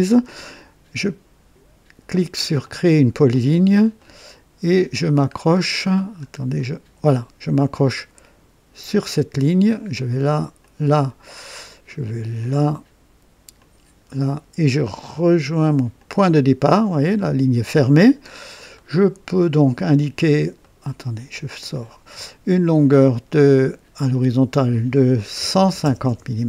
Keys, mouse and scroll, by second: 2.6 click, 3.5-4.0 scroll up 2, 4.0 right click, 6.0 scroll down 2, 6.6 right click, 8.8 click, 10.6 click, 12.4 click, 13.6 click, 16.0 click, 17.1 right click, 17.9 scroll up 1, 18.3 scroll down 1, 18.8 right click, 20.6 right click, 21.8 click, 24.1 click, 25.4 KP_1, 25.6 KP_5, 26.0 KP_0, 26.1 Return.